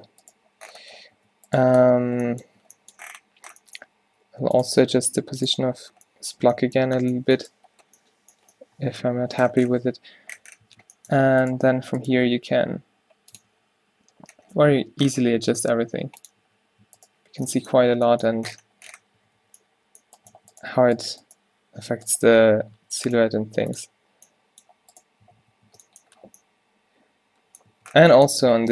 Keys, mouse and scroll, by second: 1.2 a, 2.7 a, 4.2 r, 4.7 r, 5.6 Tab, 7.2 a, 10.7 Tab, 11.3 Tab, 11.7 Tab, 12.3 g, 13.5 Tab, 14.8 Tab, 15.8 g, 16.5 Tab, 16.9 Tab, 17.9 -, 19.0-20.8 typing, 21.9-23.9 typing, 25.3 q, 25.5 q, 25.7 Tab, 27.8 Tab.